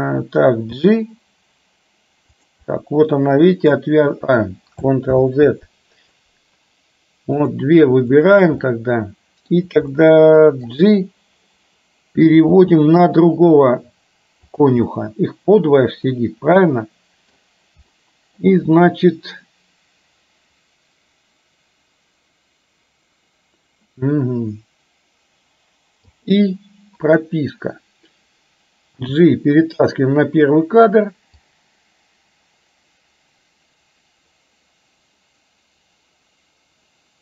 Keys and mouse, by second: 0.9 g, 2.7-3.9 middle drag, 5.2 ctrl+z, 7.5 click, 8.1-8.5 shift+drag, 8.7-9.6 middle drag, 10.0-10.9 middle drag, 12.4 g, 14.9-16.1 middle drag, 16.7-17.4 middle drag, 18.0 middle click, 26.1 i, 29.1 g, 31.5-37.2 drag.